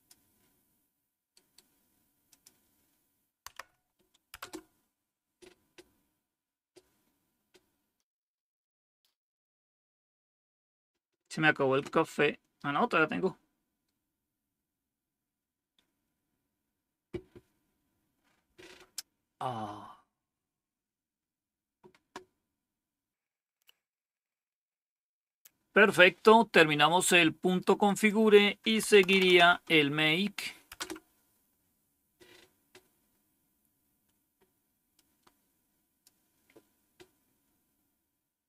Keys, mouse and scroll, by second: 1.2 right click, 2.2 click, 3.4 Tab, 4.3 Return, 22.4-27.0 scroll down 1, 27.0-27.7 scroll down 1, 27.7 click, 28.5-29.7 typing, 30.6 Return, 34.8-35.9 drag.